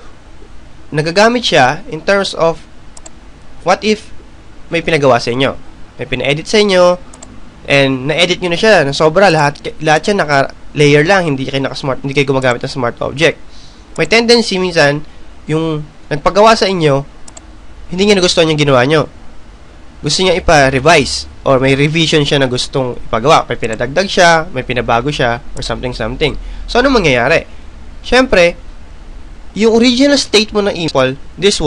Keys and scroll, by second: 27.4 Return.